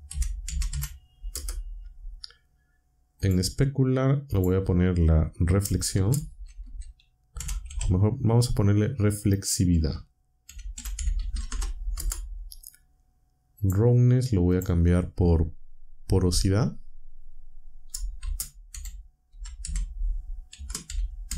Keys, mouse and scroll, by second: 0.0-2.4 typing, 1.3 Return, 3.2 click, 4.3 click, 5.7-7.7 typing, 9.7-12.0 typing, 13.6 click, 14.5 click, 18.2-21.3 typing.